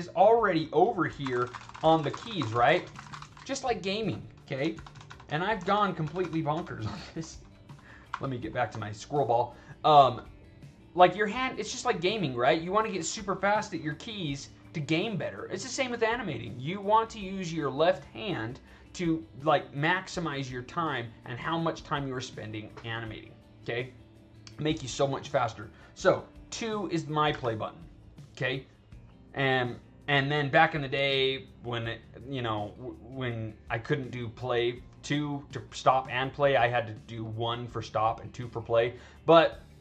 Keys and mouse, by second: 0.8-3.6 typing, 4.6 ctrl+z, 4.8 ctrl+z, 5.6 ctrl+z, 5.9 ctrl+z, 6.1 ctrl+z, 6.5 ctrl+z, 8.0 f, 8.9 alt+right click, 9.7 alt+right drag, 26.8 drag, 27.2 2, 28.5 click, 30.7 click.